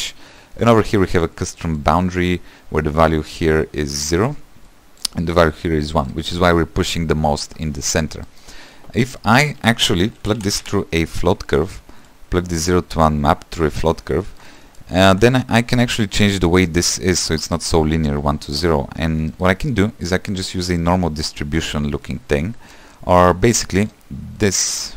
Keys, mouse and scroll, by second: 11.6 shift+a, 20.1-24.9 drag.